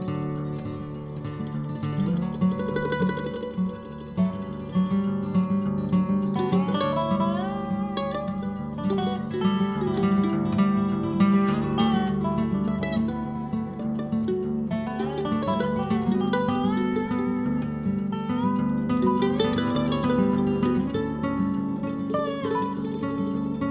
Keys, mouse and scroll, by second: 0.1-7.7 drag, 7.9 n, 9.1 click, 10.3 n, 10.5 middle click, 11.2 scroll up 1, 11.4-12.4 middle drag, 12.4-14.5 drag, 14.5 right click, 15.2-16.9 drag, 16.9-18.2 middle drag, 18.2 click, 18.8-20.0 middle drag, 20.0-20.8 scroll down 7, 20.8 click, 21.4 KP_0, 22.3-23.7 middle drag.